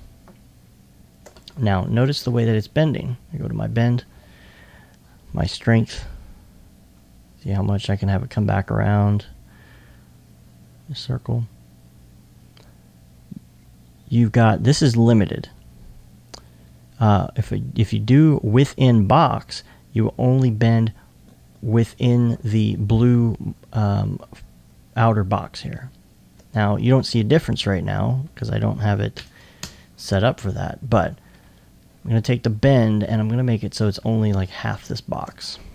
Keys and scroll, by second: 1.6 alt+1, 29.2 0.